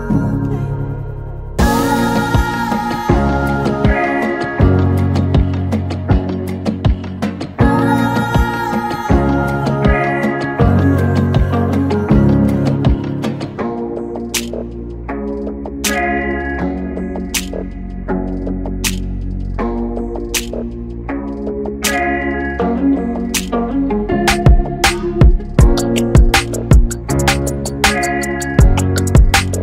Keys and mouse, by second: 17.4 click, 18.7 click, 20.1 click, 23.1-25.8 drag.